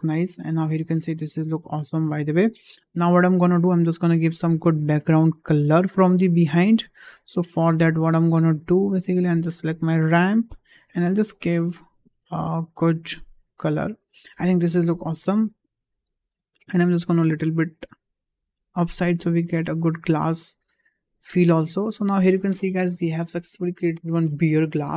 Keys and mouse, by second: 1.0-2.2 middle drag, 2.6 KP_0, 3.5 shift+middle click, 4.2 click, 10.0 drag, 15.8 click, 17.0 click, 17.7-19.4 drag, 20.5-21.7 shift+middle drag.